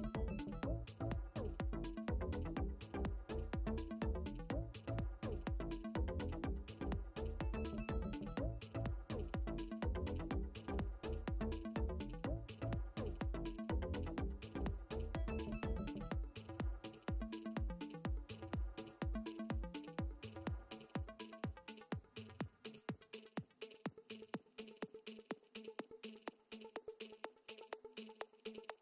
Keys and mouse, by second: 0.5 click, 5.6 ctrl+space, 6.0 click, 7.1 click, 10.3 click, 11.5 click, 13.1 click, 15.1 click, 16.9 click, 18.6 click, 20.1 click, 21.4 click, 23.2 click, 25.0 ctrl+click, 26.1 space.